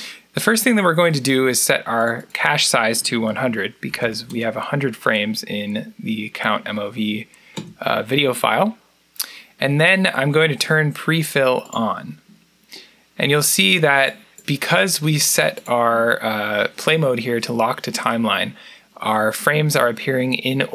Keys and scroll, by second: 3.5-4.6 typing, 7.4 Return.